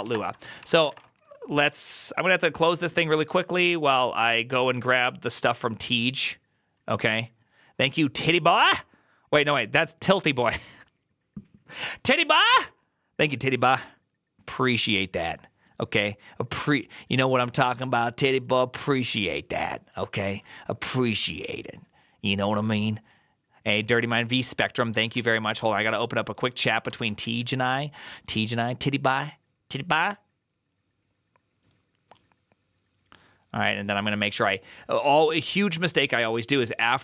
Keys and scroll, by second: 0.0-1.2 typing.